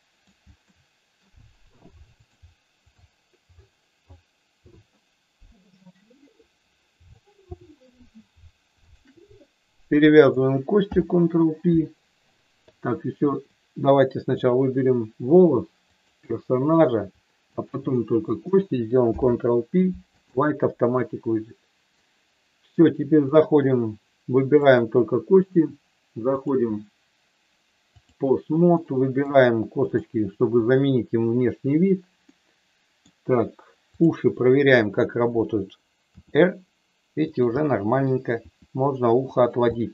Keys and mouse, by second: 0.6 shift+middle click, 2.3 click, 7.0 click, 8.8 shift+click, 10.8 ctrl+p, 14.4 click, 15.9 shift+click, 17.7 shift+click, 19.0 ctrl+p, 23.4 click, 24.7 click, 26.4-28.4 drag, 28.9 middle click, 29.9 click, 32.3 middle click, 36.1 r, 37.3 click, 37.5 middle click, 38.4 r, 39.3 click, 39.6 middle click.